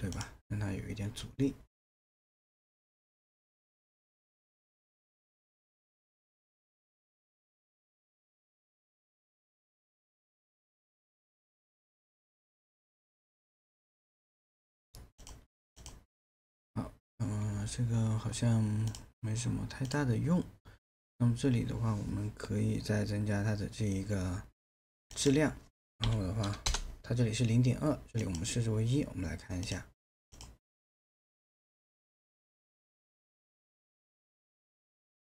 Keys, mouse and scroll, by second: 26.0 KP_1, 26.7 Return.